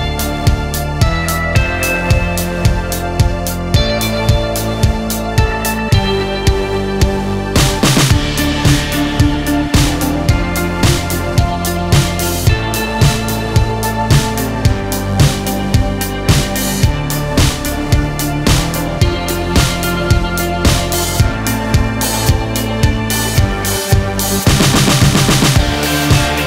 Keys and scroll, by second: 0.1 ctrl+z, 6.9 ctrl+r, 8.3 ctrl+a, 20.6 ctrl+r, 21.8 ctrl+a.